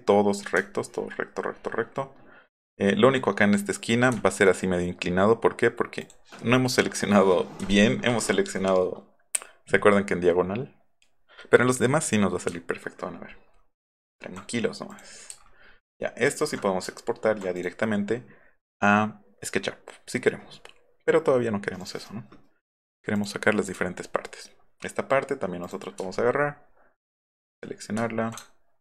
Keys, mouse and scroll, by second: 0.7 alt+middle click, 0.9 alt+middle click, 1.3 alt+middle click, 1.5 alt+middle click, 1.7 alt+middle click, 2.0 alt+middle click, 2.4 alt+middle click, 2.7 alt+middle click, 4.1 alt+middle click, 6.0 click, 7.7-8.3 alt+scroll up 3, 12.5 alt+middle click, 12.5 scroll up 1, 12.7-13.1 scroll down 2, 13.0 alt+middle click, 13.9 alt+scroll up 2, 14.5 scroll up 2, 15.5 alt+middle click, 15.7 alt+middle click, 16.0 alt+middle click, 17.0 alt+scroll down 1, 17.2 alt+scroll up 1, 17.6 click, 21.8 click, 23.2 click, 23.7 click, 25.7 click, 26.2-26.5 alt+scroll up 2, 27.2 click.